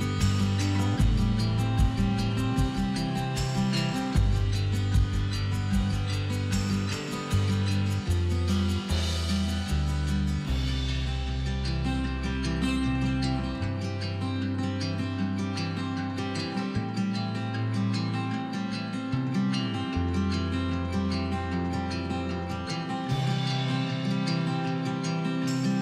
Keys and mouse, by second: 0.3 z, 1.0 ctrl+KP_Add, 1.3 ctrl+KP_Add, 2.9 l, 3.2 z, 4.5 z, 7.7 a, 7.9 l, 8.9-10.6 typing, 10.5-11.7 drag, 11.9 click, 11.9 z, 12.0 z, 12.2 z, 13.7 click, 14.0 right click, 14.5 z, 15.1 z, 16.0 a, 16.1 ctrl+z, 16.2 ctrl+z, 17.1-19.3 typing, 18.1 ctrl+z, 20.3 ctrl+s, 21.3 l, 22.4-25.1 typing, 22.5 ctrl+s, 24.6 ctrl+KP_Add, 24.8 ctrl+KP_Add, 25.3 ctrl+z.